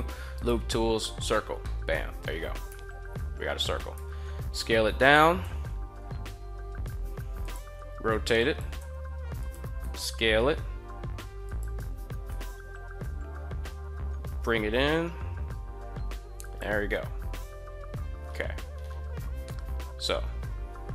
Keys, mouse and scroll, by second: 1.4 scroll up 1, 1.5 middle drag, 2.4 KP_1, 3.7 s, 4.7 click, 5.2 g, 6.7 Tab, 7.2 drag, 7.6 r, 8.2 click, 8.6 g, 9.2 click, 9.4 s, 11.3 click, 12.0 g, 16.0 click, 19.2 KP_1.